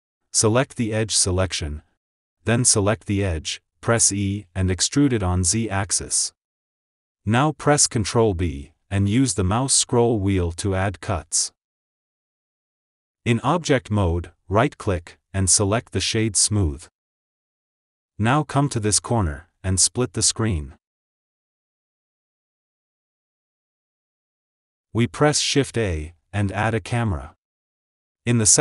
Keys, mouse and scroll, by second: 0.6-2.6 middle drag, 2.6 click, 4.0 e, 7.7 click, 9.2 ctrl+b, 12.3 KP_1, 12.9 Tab, 13.3 click, 13.8-15.4 shift+middle drag, 15.4 click, 16.9-17.6 right drag, 17.6 click, 17.8 ctrl+s, 20.9-22.8 drag, 23.8-24.2 shift+middle drag, 24.2 scroll up 2, 25.0 shift+middle drag, 25.3 shift+a, 27.2 shift+a.